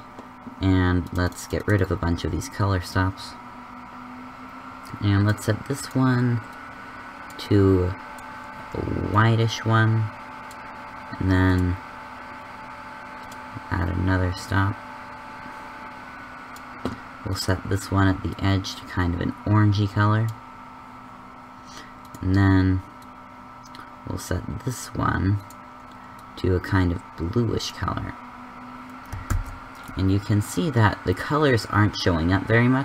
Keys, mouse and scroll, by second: 0.9-5.0 drag, 5.9-7.9 drag, 9.2-16.3 drag, 18.1 click, 29.2 shift+z.